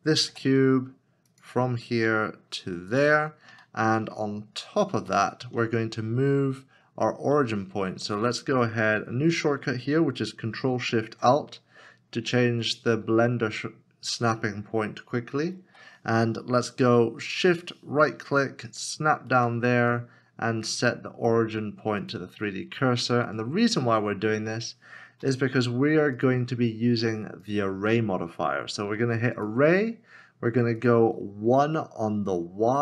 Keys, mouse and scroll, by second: 0.3 g, 3.6 g, 3.7 shift+middle click, 4.5 scroll up 1, 5.1 shift+middle click, 10.6 ctrl+s, 11.0 ctrl+shift+t, 17.8 shift+right click, 18.6 ctrl+shift+right click, 24.0 middle click, 25.2 w, 32.6 w, 32.7 1.